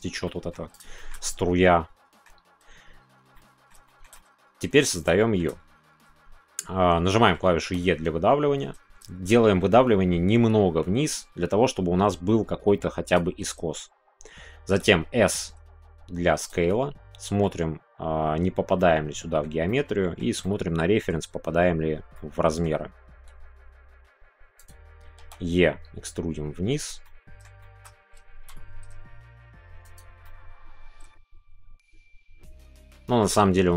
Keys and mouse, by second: 0.9 shift+middle click, 1.2-2.2 middle drag, 3.3 middle click, 3.8 shift+middle click, 4.1 middle click, 5.2 shift+middle click, 7.1 middle click, 13.1 shift+click, 16.4 click, 16.6 middle click, 18.7 middle click, 19.6 middle click, 20.4 middle click, 22.1 middle click, 27.0 middle click, 30.2 middle click, 30.5-32.0 right drag, 32.0-33.7 middle drag.